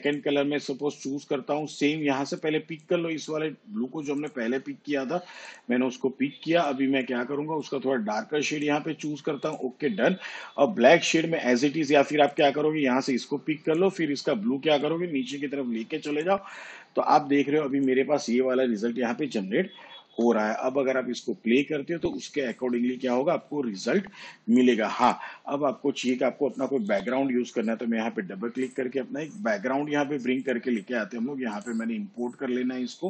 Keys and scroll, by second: 20.4 shift+/.